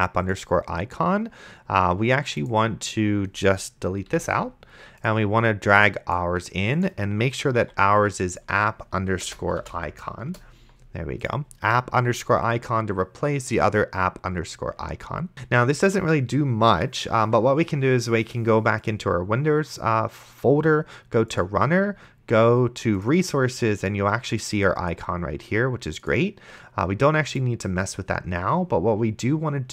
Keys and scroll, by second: 4.4 Delete, 7.6 F2, 9.2 BackSpace, 9.9 shift+-, 10.3 Return.